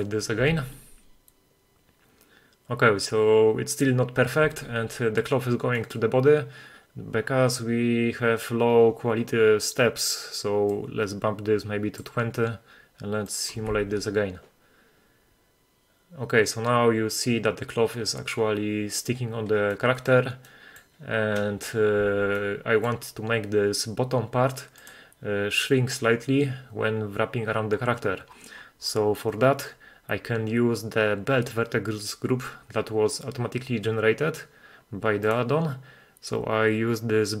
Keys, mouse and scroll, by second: 0.0 click, 0.6 shift+space, 4.6 shift+space, 5.8 middle click, 6.8-8.5 scroll up 28, 8.5-10.2 scroll down 1, 10.2 scroll down 1, 10.8-12.1 drag, 13.3 click, 13.8 shift+space, 18.6-19.4 middle drag, 18.6 scroll down 1, 20.2 middle drag, 20.9 middle drag, 22.3 shift+space, 22.4-22.9 middle drag, 24.8 click, 27.4-29.2 scroll down 28, 29.4-31.2 scroll down 21, 34.5-35.3 scroll down 1, 35.3-37.4 drag, 35.3-36.3 scroll down 4.